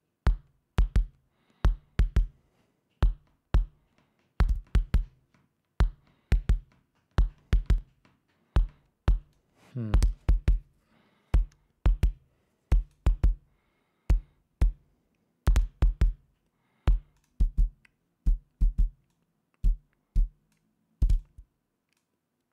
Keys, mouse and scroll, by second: 0.2-2.8 drag, 9.8 click, 17.6 click, 19.5-21.2 drag, 21.6-22.5 drag.